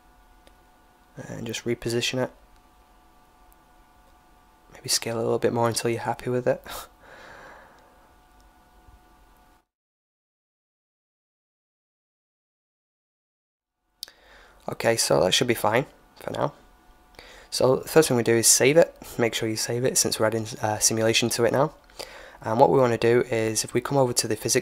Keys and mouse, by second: 0.5-2.5 drag, 2.9 s, 7.4 s, 10.2-11.9 drag, 13.4-15.3 drag, 15.0-16.8 middle drag, 17.8 ctrl+s.